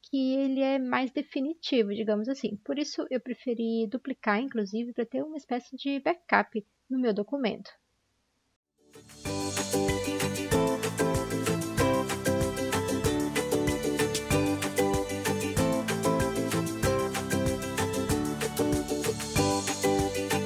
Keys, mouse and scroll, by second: 10.6 ctrl+z, 15.4 ctrl+d, 18.1 ctrl+z, 18.7 ctrl+z, 19.0 ctrl+shift+i.